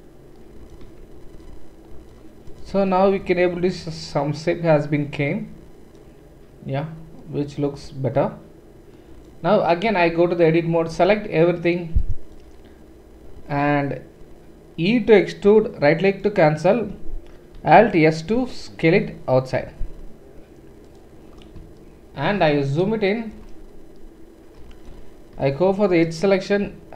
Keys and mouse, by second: 0.8 Tab, 9.9 Tab, 10.9 a, 15.4 e, 17.6 alt+s, 21.4-22.6 shift+middle drag, 25.3-26.2 typing, 26.1 alt+click.